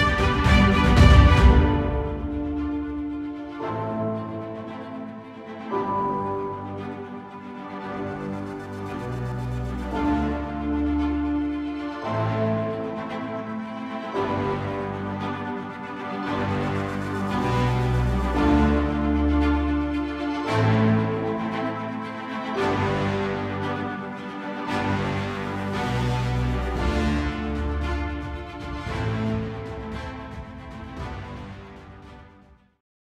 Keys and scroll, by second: 16.0 ctrl+0.